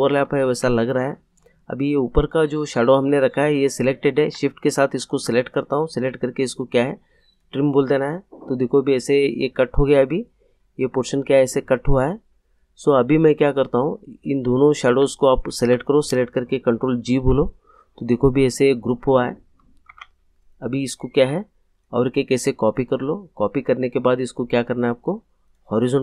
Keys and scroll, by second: 0.5 ctrl+z, 17.0 ctrl+g, 19.9 ctrl+z.